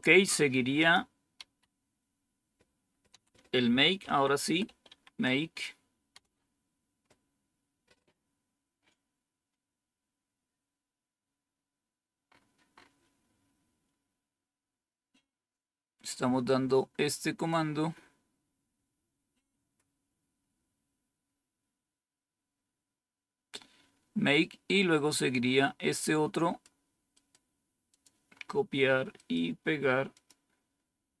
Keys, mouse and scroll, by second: 0.7 click, 1.3 Up, 3.0 Down, 3.7-5.3 typing, 6.0 Return, 11.5-12.2 scroll up 1, 12.2-13.5 scroll up 1, 13.8 scroll down 1, 16.4-17.4 drag, 25.1-26.6 drag, 27.8 click, 30.1 click, 31.1 Right.